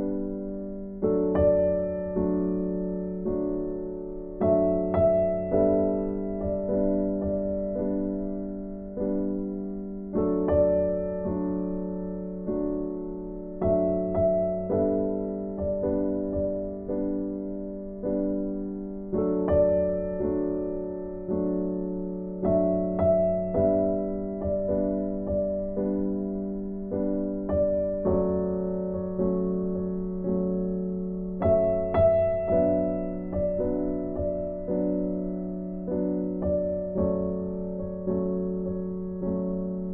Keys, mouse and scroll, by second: 2.6 right click, 3.7 right click, 5.0 right click, 5.9 click, 7.6 right click, 8.2 scroll up 1, 8.6 right click, 10.7 click, 12.0 right click, 14.0 click, 15.4 right click, 17.2 click, 19.1 scroll down 1, 19.4 right click, 25.4 click, 25.9 right click, 27.6 click, 30.4 click.